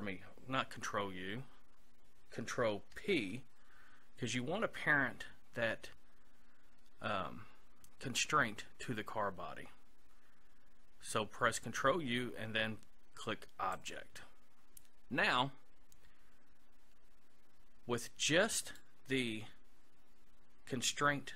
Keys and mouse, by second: 2.9 ctrl+p, 18.7-21.3 right drag.